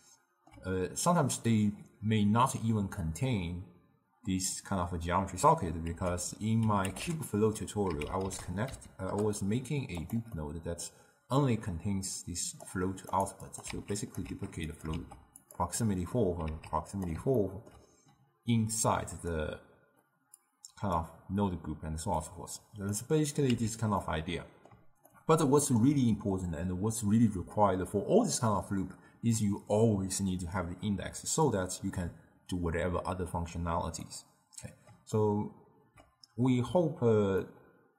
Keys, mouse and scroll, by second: 6.0 ctrl+a, 10.4-12.1 middle drag, 12.1-13.3 drag, 13.5 click, 13.8 shift+d, 14.4 shift+d, 15.0 shift+d, 16.0-16.6 middle drag, 16.6 shift+d, 17.5-19.0 ctrl+middle drag, 19.0 click, 20.5 click, 22.3-23.6 drag, 23.6 x, 24.1-28.2 middle drag, 34.1-37.9 middle drag.